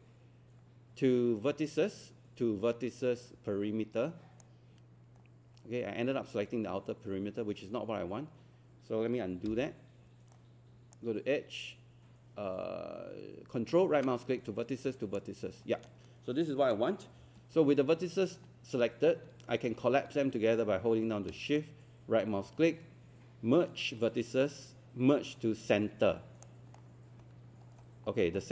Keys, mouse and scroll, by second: 5.7 scroll up 1, 5.9 scroll down 1, 9.5 z, 10.3-11.4 right drag, 13.7-15.4 ctrl+right drag, 21.6-27.4 shift+right drag, 27.7-28.3 scroll down 1, 28.3 scroll up 1.